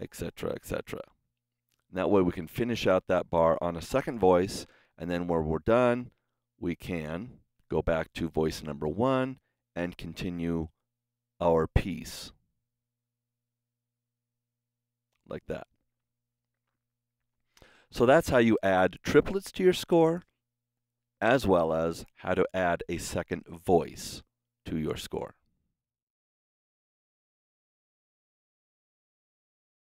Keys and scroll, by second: 7.5 Escape, 20.7 Escape.